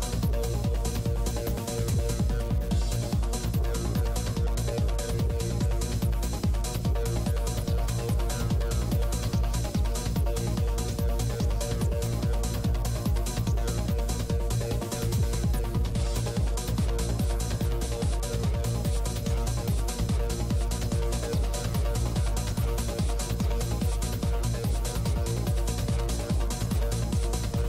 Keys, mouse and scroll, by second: 2.7-4.5 middle drag, 3.4-4.5 drag, 4.5 g, 4.5 f, 4.7-5.9 middle drag, 4.8 f, 5.4 click, 7.4 middle click, 8.1 i, 8.1 f, 8.9 f, 9.1-10.9 drag, 9.6 f, 11.4 click, 12.1 click, 12.6-14.0 middle drag, 13.7-15.0 typing, 14.1 click, 15.0 ctrl+z, 16.0-17.4 drag, 16.2-17.4 middle drag, 16.3 f, 17.5 shift+f, 18.3 click, 18.5 middle click, 18.5-20.4 typing, 19.3 click, 20.7-21.8 drag, 22.2 f, 22.4 f, 23.0 click, 23.2 f, 23.7 f, 24.0 click, 24.9 middle click, 25.9 click, 26.3 middle click, 26.4 click, 26.4 middle click, 27.5 f.